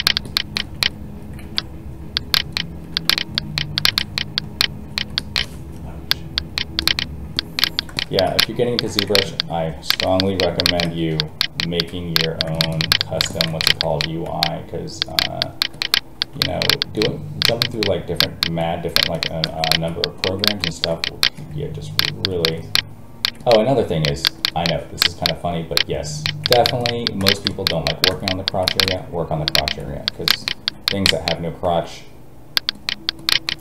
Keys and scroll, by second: 1.4 alt+a, 14.2 alt+a, 19.7 alt+a, 31.6 alt+a.